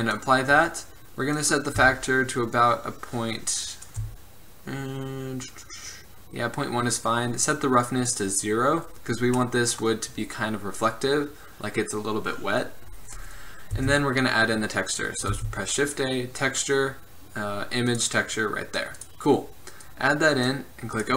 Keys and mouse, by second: 3.2-7.4 drag, 7.4 middle click, 7.7-12.5 drag, 13.9 shift+a, 15.5 shift+a, 20.0-20.6 drag.